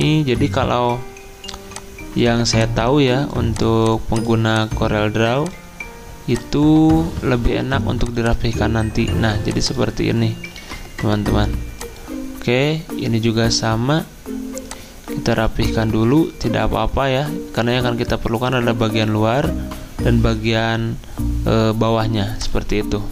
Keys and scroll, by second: 10.6 ctrl+z.